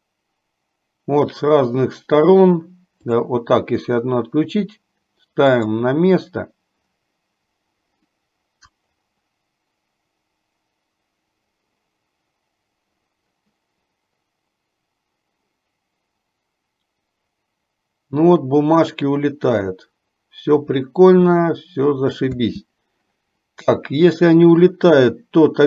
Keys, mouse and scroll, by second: 3.4 click, 5.7 click, 22.7 space, 24.5 click.